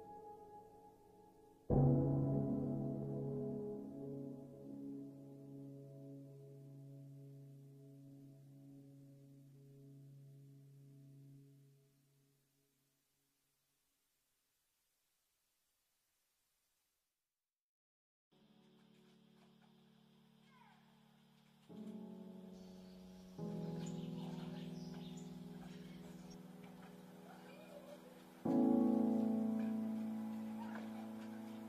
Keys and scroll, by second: 7.0 space, 9.3 space, 16.3 space, 17.3 space, 21.2 space, 26.2 ctrl+z.